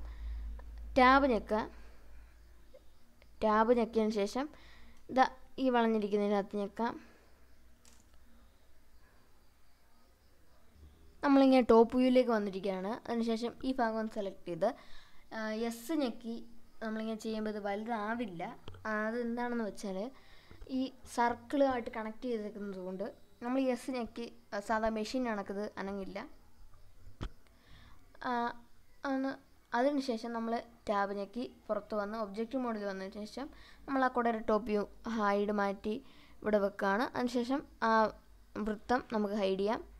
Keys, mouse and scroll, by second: 1.1 click, 3.7 Tab, 4.0 click, 4.9 Tab, 5.8 shift+middle click, 6.8-7.2 scroll up 2, 7.2-9.6 middle drag, 10.4 click, 10.7-12.5 shift+middle drag, 13.1 click, 15.6-17.1 drag, 17.6 s, 19.6 right click, 20.0-20.4 scroll down 2, 23.0 Tab, 23.4-23.9 scroll down 2, 24.2-24.6 middle drag, 25.3 click, 26.4 h, 26.9 h, 29.3 drag, 31.7 click, 32.5 g, 33.9 click, 34.8 g, 36.1 click, 37.9 click, 39.1 drag.